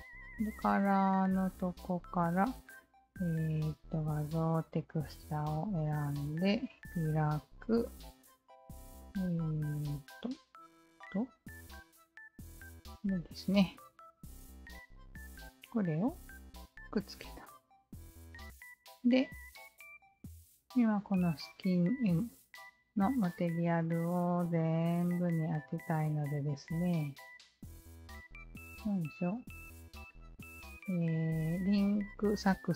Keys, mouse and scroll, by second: 1.5 click, 4.3-5.9 shift+drag, 6.2-7.7 shift+drag, 8.0 shift+click, 10.1-11.5 shift+drag, 11.8 shift+click, 13.3 shift+click, 15.5-17.8 alt+drag, 18.5-21.1 alt+drag, 23.6-24.4 alt+drag, 27.4 alt+click, 29.7-31.1 alt+drag.